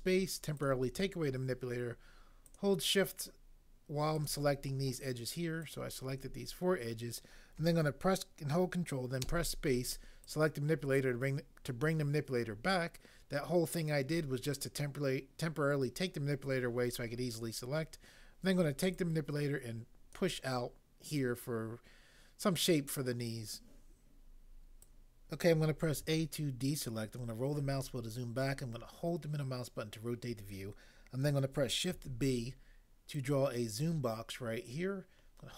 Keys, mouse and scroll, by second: 9.2 ctrl+space, 25.9 a, 32.0 b.